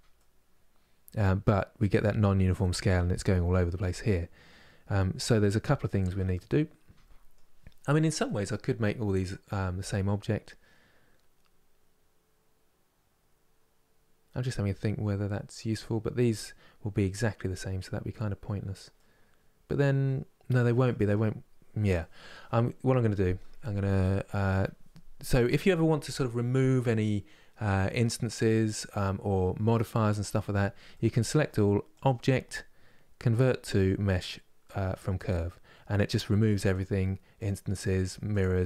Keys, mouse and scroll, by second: 5.3 scroll up 2, 5.7 Tab, 6.0-34.9 middle drag, 36.4 click, 37.1 click, 37.5 click, 38.0 click, 38.5 click.